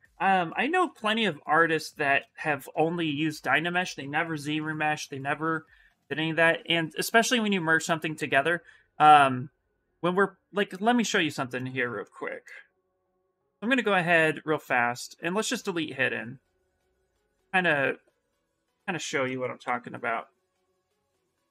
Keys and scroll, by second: 0.6 ctrl+z, 3.1 2, 15.4 2, 19.4-21.5 typing.